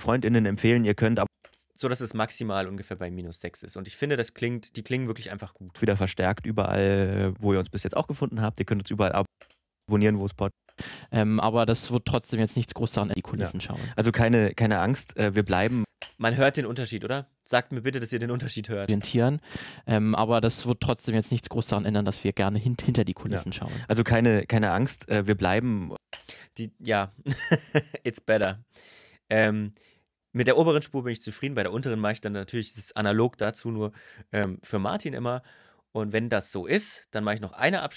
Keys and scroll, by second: 1.0 space, 5.5 space, 9.0 space, 15.6 space, 18.6 space, 25.7 space.